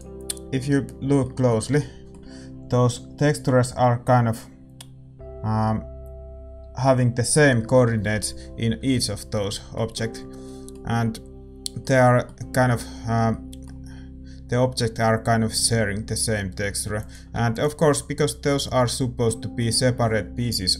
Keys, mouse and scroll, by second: 17.5 ctrl+s, 17.5-20.6 drag.